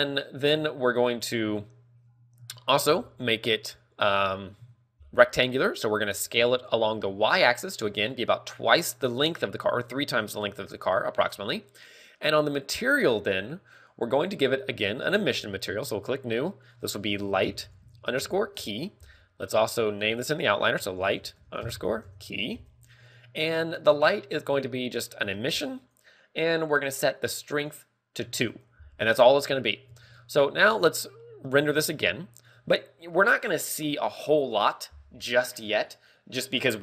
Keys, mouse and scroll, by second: 4.0 click, 5.0 KP_7, 5.1 KP_7, 6.0 scroll down 3, 7.2 right click, 7.5 s, 11.9 click, 13.2 click, 15.8 click, 16.4 click, 17.0 click, 20.3 ctrl+click, 24.8 click, 28.0-36.8 ctrl+click, 30.3 ctrl+w, 32.0 click.